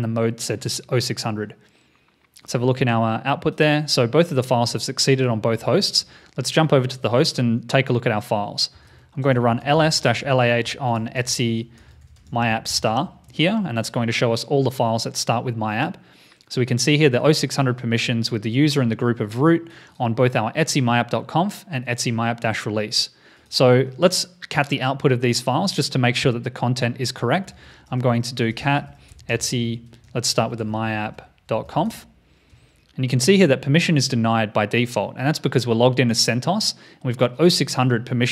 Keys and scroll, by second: 5.9 super+Tab.